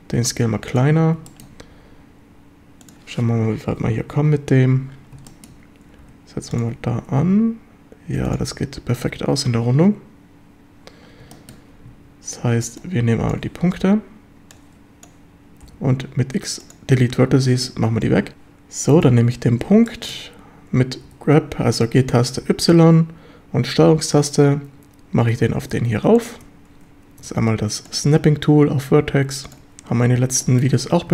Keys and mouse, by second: 0.8 click, 1.3 shift+middle click, 1.8 g, 2.9 click, 5.3 shift+middle click, 6.6 click, 6.6 g, 8.3 click, 11.4 shift+middle drag, 11.9 a, 12.7 b, 13.8 b, 15.7 x, 17.5 shift+middle drag, 19.9 shift+middle drag, 21.1 g, 22.4 y, 26.2 ctrl+click, 28.0-29.7 drag, 30.4 shift+middle drag, 30.7 a.